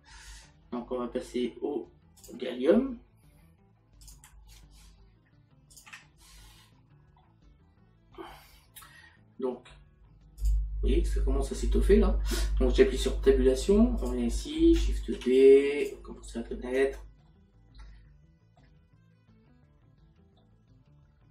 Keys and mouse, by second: 4.4 click, 7.2 middle click, 10.4 click, 13.0 Tab, 18.0 middle click, 20.4 middle click.